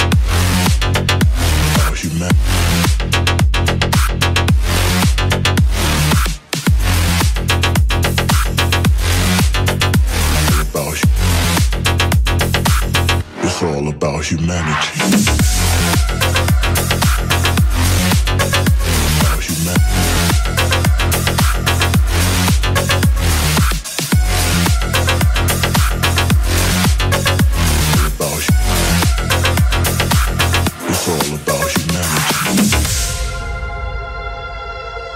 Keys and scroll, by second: 2.2 ctrl+z, 15.3 ctrl+t, 18.0 ctrl+z, 29.7 ctrl+z.